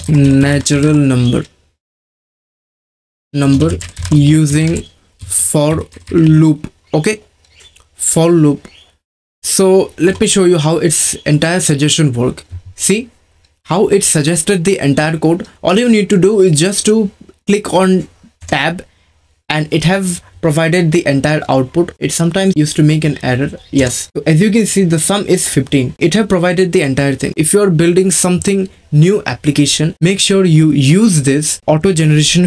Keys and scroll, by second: 0.0-0.7 typing, 3.3-6.7 typing, 10.1 Return, 18.4 Tab, 22.5 BackSpace, 23.7 Tab.